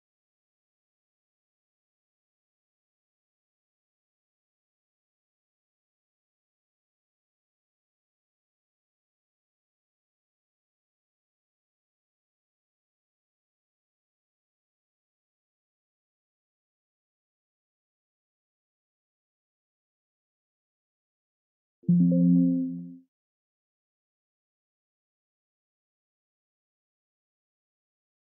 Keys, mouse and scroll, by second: 0.4 right click, 0.8 click, 1.2 click, 2.7 click, 4.6 click, 6.4 click, 8.6 click, 10.2 click, 11.5 click, 14.0 click, 16.5 click, 18.6-19.3 scroll, 19.3 click, 19.8 click, 22.5 click, 26.2 click.